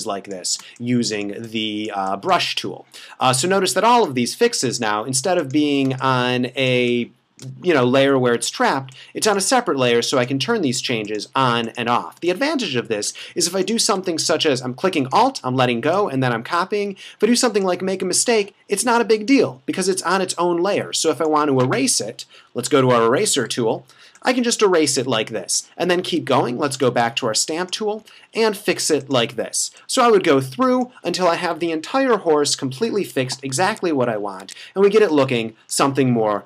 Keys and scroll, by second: 0.6 space, 5.9 space, 12.2 space, 22.4 e, 23.7 [, 26.1 s, 26.9 space, 31.5 super+-, 33.7 super+`, 34.4 super+`, 35.2 space.